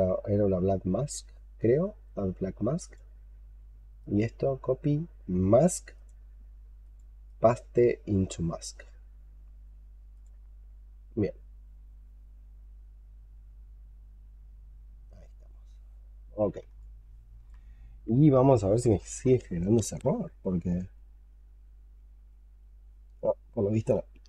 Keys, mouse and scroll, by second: 3.9 right click, 7.1 right click, 12.7-15.5 scroll up 2, 15.5-16.6 scroll up 9, 16.7 alt+click, 21.2 double click, 21.5 double click, 21.8 double click, 22.2 double click, 22.5 double click, 23.4 double click, 23.6 double click, 23.8 double click, 24.0 double click.